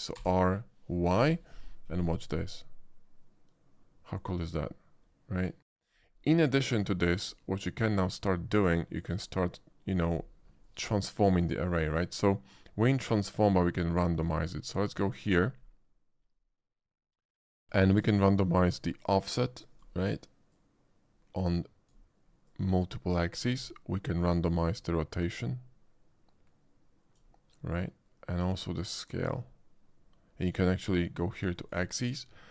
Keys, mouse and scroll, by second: 0.2 r, 1.2 y, 5.6 click, 6.1-6.8 middle drag, 7.0 shift+middle drag, 7.4-7.9 shift+middle drag, 9.2 shift+click, 14.2 click, 15.0 click, 16.2 middle click, 16.8 shift+middle drag, 17.1-17.6 shift+middle drag, 17.9 shift+middle click, 18.8-19.8 shift+drag, 20.5-21.9 shift+drag, 22.4-23.5 drag, 24.7-27.2 drag, 27.7-28.8 drag, 31.5 click.